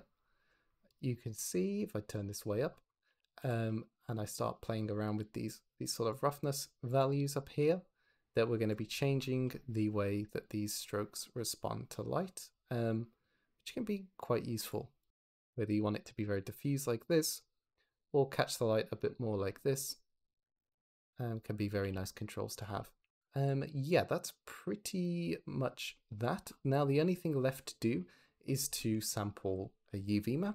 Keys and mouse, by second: 1.3 click, 2.9 g, 5.1 drag, 6.0 click, 6.8 click, 7.1 click, 8.5 middle click, 9.1-10.3 middle drag, 10.3-12.4 drag, 13.1-14.6 drag, 15.1-17.2 drag, 17.8-18.9 drag, 20.3 middle click, 20.5 middle click, 21.7 g, 23.1 x, 26.8 click, 28.3 drag, 28.6 shift+middle click.